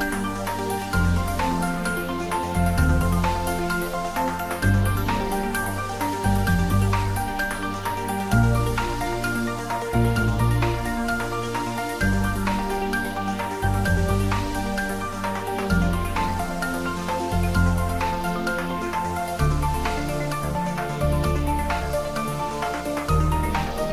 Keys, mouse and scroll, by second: 0.6 click, 3.2 click, 3.5-4.8 scroll up 1, 4.8-8.2 middle drag, 8.2 ctrl+r, 9.9 click, 12.3 ctrl+z, 13.5 ctrl+e, 14.2 click, 15.0 ctrl+r, 16.2 click, 19.1 click, 20.3 ctrl+r, 21.3 click, 23.5 middle click.